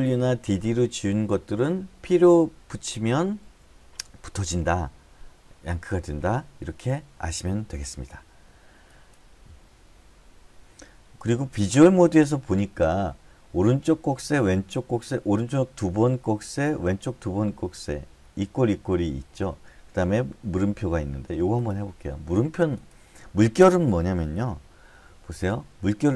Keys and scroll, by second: 25.6 Left, 25.8 Left.